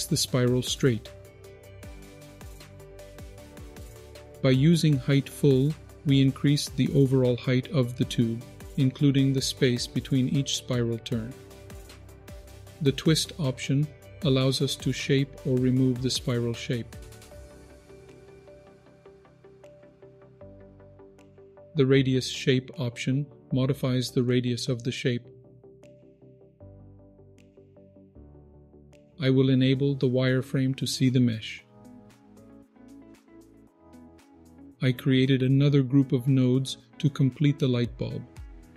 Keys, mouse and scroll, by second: 5.3-12.0 drag, 12.2 ctrl+z, 13.9-19.3 drag, 19.5 ctrl+z, 19.8-20.2 scroll up 6, 20.2 middle click, 21.2 middle click, 21.2-21.9 scroll down 2, 23.3-27.7 drag, 27.9 ctrl+z, 28.5 click, 28.6 middle drag, 29.6-31.6 drag, 32.4-33.4 drag, 33.7 middle click, 34.5 click.